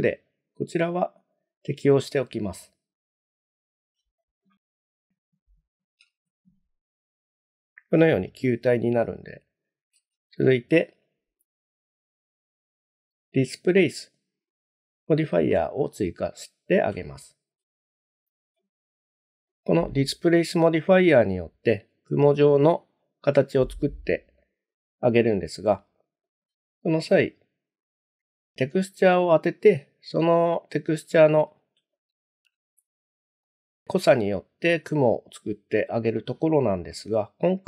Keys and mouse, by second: 0.7-3.3 drag, 6.1 shift+z, 8.2 shift+middle drag, 10.0 shift+z, 11.8-14.3 drag, 17.1-17.6 shift+middle drag, 24.4-24.7 shift+middle drag, 31.9 shift+middle click, 32.6-33.4 middle drag.